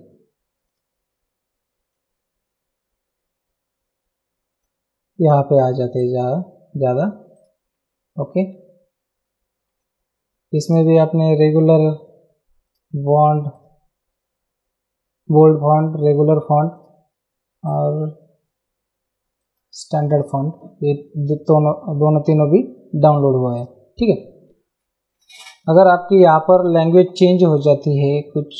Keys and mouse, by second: 0.3 click, 1.9 click, 6.0 click, 7.3 click, 7.7 Down, 9.7 Up, 10.6 click, 12.6 click, 16.0 click, 19.4 click, 23.0 click, 27.2 t.